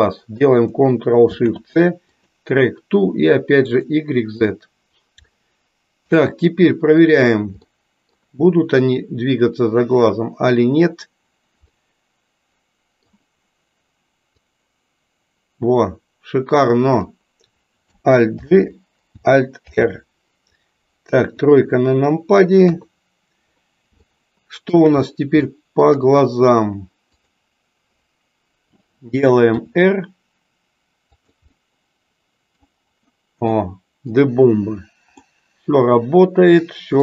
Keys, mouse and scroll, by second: 1.1 ctrl+shift+s, 3.7 click, 4.4 click, 5.4 middle click, 6.9 click, 7.8 middle click, 11.7-13.3 middle drag, 14.4 click, 14.7-17.2 drag, 18.3 alt+g, 19.6 alt+r, 21.2 KP_2, 24.0 shift+middle click, 25.5 shift+middle click, 27.0 click, 29.5 r, 31.7-32.7 middle drag, 33.5 middle click, 35.3-37.0 middle drag.